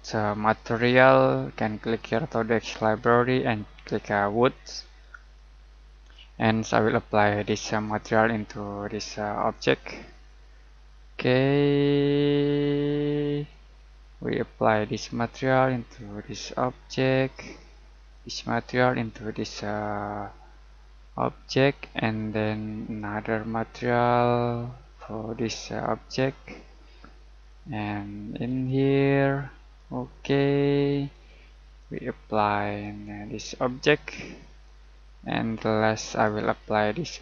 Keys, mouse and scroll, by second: 2.7 scroll down 1, 4.4 click, 12.6 click, 22.1 click, 27.4 click.